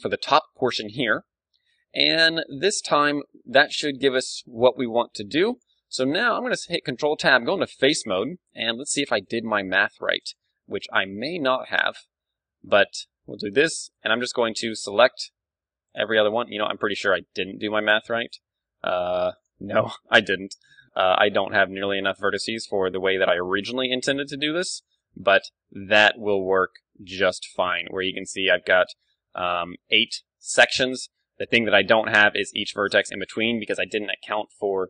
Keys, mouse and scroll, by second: 1.5 g, 2.5-4.3 drag, 4.5 g, 5.6-7.2 drag, 6.0 a, 6.8 ctrl+Tab, 8.8-12.3 right drag, 10.0 a, 11.1 a, 12.3-24.1 middle drag, 24.1 right click, 24.9-26.5 middle drag, 26.5 KP_1, 26.6-30.2 middle drag, 27.9 z, 30.6 KP_1, 31.1 z, 31.7-33.8 middle drag.